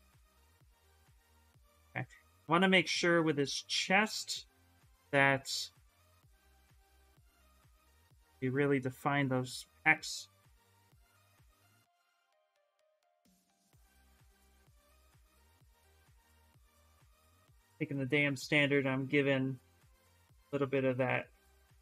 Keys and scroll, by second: 4.9-6.7 typing.